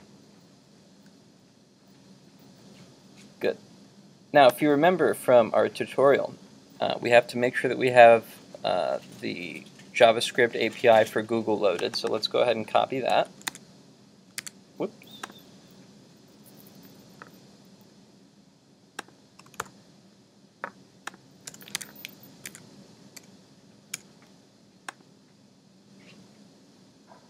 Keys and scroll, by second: 13.2 super+c, 13.6 super+Tab, 14.5 super+Tab, 19.7 super+v, 21.8 super+v, 22.5 super+Tab.